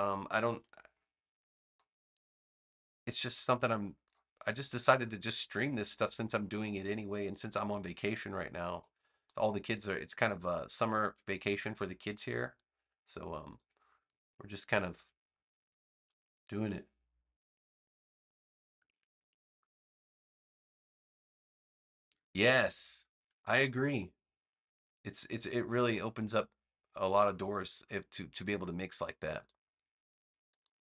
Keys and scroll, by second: 0.4 a.